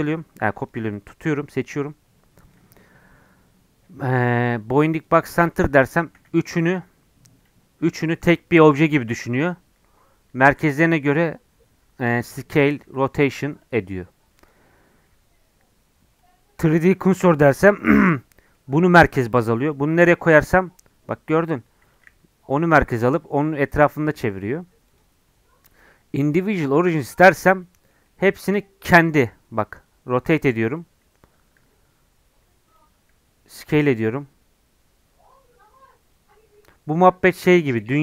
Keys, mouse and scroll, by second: 6.2 s, 10.5 s, 12.8 r, 14.4-16.8 drag, 16.8 scroll down 1, 17.2-19.7 middle drag, 19.7 shift+right click, 20.3 s, 22.1 r, 24.9-27.6 drag, 27.6-29.0 middle drag, 29.0 r, 31.6 r, 33.5 s.